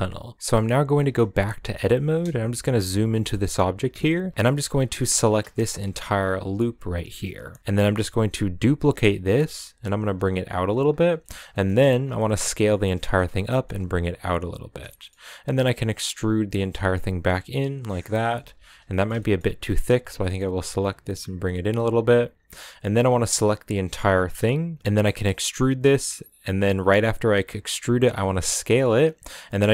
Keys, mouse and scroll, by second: 0.3-0.7 scroll up 2, 0.7 shift+middle click, 1.1 Tab, 1.4 scroll up 1, 2.2 KP_Decimal, 2.9 middle click, 3.3 scroll up 2, 3.5 middle click, 4.3 alt+right click, 4.4 a, 5.3 alt+right drag, 7.4 middle click, 7.6 ctrl+z, 8.5 shift+d, 10.8 scroll down 2, 11.0 middle click, 11.4 scroll up 2, 11.9 s, 12.7 middle click, 13.2 g, 14.1 s, 14.6 middle click, 14.9-15.5 scroll up 1, 15.5 e, 18.3 alt+right click, 18.6 middle click, 19.2 scroll up 3, 19.4 middle click, 19.9 g, 22.1 scroll down 1, 22.2-22.8 middle drag, 22.8 right click, 24.8 middle click, 25.1 e.